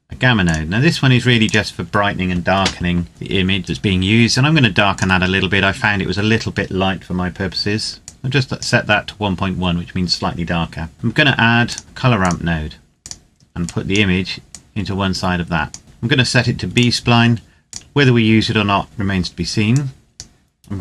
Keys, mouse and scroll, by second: 0.4 click, 4.6 click, 7.8 click, 11.4 click, 16.4 click, 18.8-19.5 scroll down 1, 19.5 click.